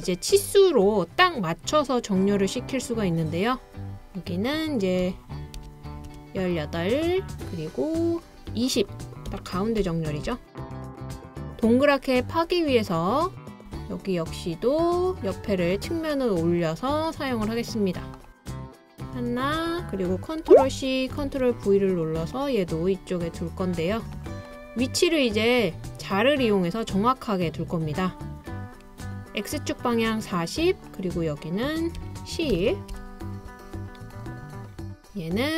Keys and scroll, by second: 2.7 typing, 5.1-6.6 typing, 9.2-9.8 typing, 20.7 super+c, 21.3 super+v, 32.0-33.0 typing.